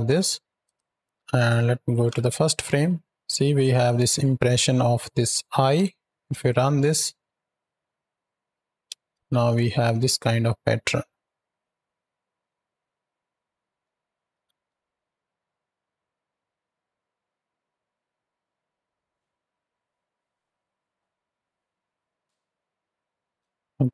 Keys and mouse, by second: 0.5-1.0 drag, 1.0 x, 1.8 shift+Right, 1.9 shift+Left, 3.3-5.6 drag, 5.6 KP_7, 6.0 space, 8.9 ctrl+space, 9.9 z, 10.6 z, 11.1-11.5 drag, 11.8 click, 12.4 ctrl+click, 13.2 click, 14.2 shift+Left, 23.1 space, 23.6 KP_7.